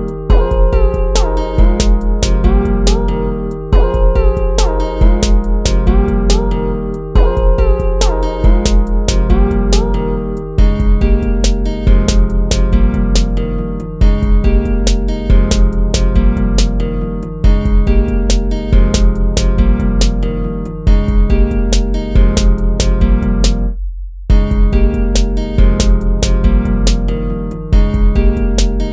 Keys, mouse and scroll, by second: 6.3 ctrl+z, 10.7 ctrl+-, 11.5 ctrl+-, 11.9 ctrl++, 12.2 ctrl+-, 12.7 ctrl++, 19.5 ctrl+-, 21.1 ctrl++, 23.6 ctrl+z.